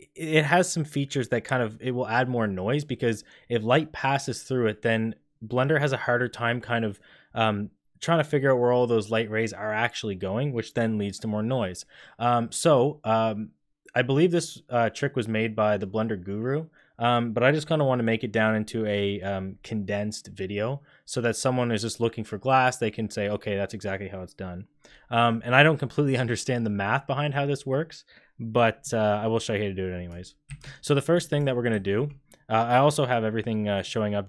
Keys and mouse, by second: 31.2 click, 31.7 shift+a.